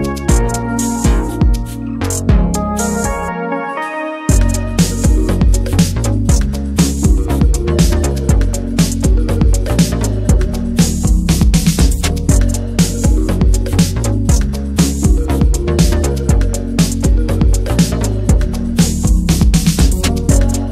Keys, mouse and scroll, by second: 11.3 click, 11.9-13.2 middle drag, 13.2-13.6 drag, 13.7 Tab, 13.9 middle click, 14.8-16.8 drag, 16.8 Tab, 16.9-17.2 middle drag, 17.2 Tab, 17.3-18.0 drag, 18.0 /, 18.2 middle click, 18.5 Tab, 18.6-20.5 middle drag, 20.5 click.